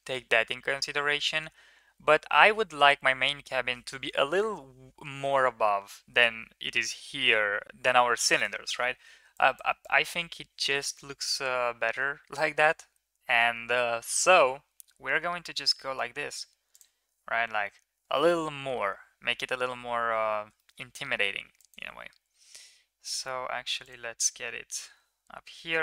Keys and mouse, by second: 9.2 middle click, 9.6 middle click, 11.3 e, 19.2 shift+middle click, 20.4 shift+middle click, 21.5 middle click, 22.0 g, 25.7 middle click.